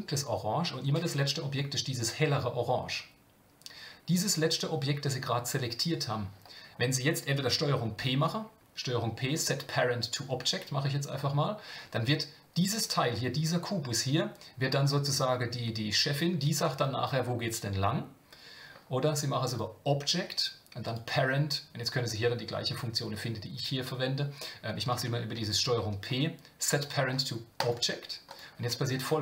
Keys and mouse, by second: 8.0 ctrl+p, 19.6-24.2 drag, 25.3 ctrl+p.